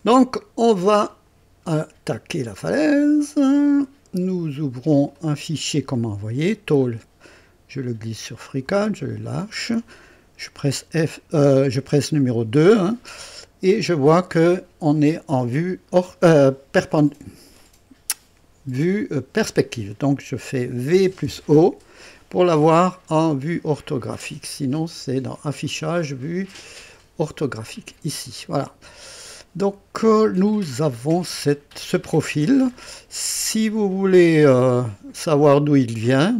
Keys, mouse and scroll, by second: 1.2 click, 3.6 click, 5.1 click, 6.8-8.8 drag, 10.7 KP_2, 20.7-21.9 typing, 23.2-23.6 scroll up 1, 23.7-24.5 right drag, 25.3 click, 28.9 right click, 29.8 scroll up 2, 30.5-31.3 right drag, 31.5 scroll up 2, 32.0-32.9 right drag.